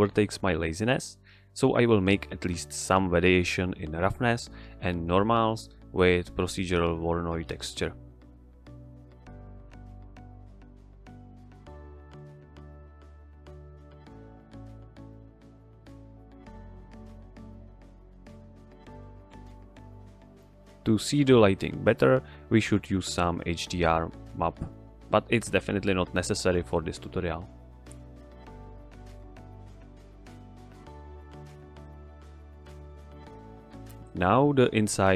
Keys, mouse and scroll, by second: 2.0 click, 2.2 click, 3.1 ctrl+shift+click, 3.6-4.7 drag, 5.2 shift+a, 6.1-7.2 drag, 11.4 shift+a, 11.8 click, 12.2 middle click, 12.9 drag, 14.2-14.5 middle click, 14.7 ctrl+shift+click, 15.6-16.1 scroll up 1, 16.1-16.8 scroll down 1, 16.9-17.5 drag, 19.2 scroll down 1, 19.4 scroll up 1, 19.4-19.8 middle click, 20.3 g, 20.4 click, 20.7 g, 20.8 click, 21.9-22.2 middle click, 22.3-22.6 scroll up 1, 22.6 click, 23.0 x, 23.3 click, 23.6 ctrl+t, 24.0 click, 25.2 click, 27.4 click.